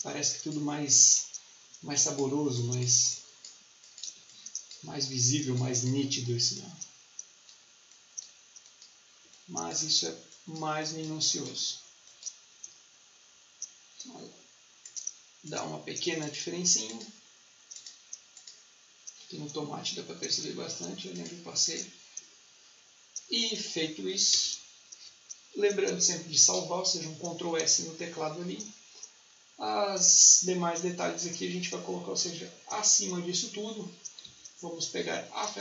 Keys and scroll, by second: 4.0 space, 9.1 space, 24.2 ctrl+s, 34.1 t, 35.3 t.